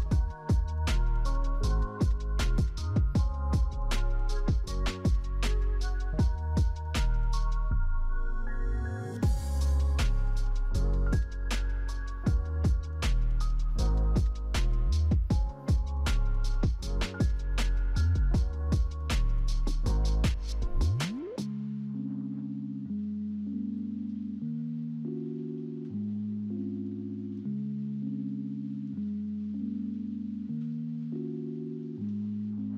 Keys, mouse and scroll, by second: 0.6 double click, 0.9 double click, 1.2 double click, 2.6-3.8 typing, 4.0 Return, 16.9 double click, 17.5 double click, 18.1-19.1 typing, 18.3 double click, 20.9-22.1 typing, 32.1 scroll down 4.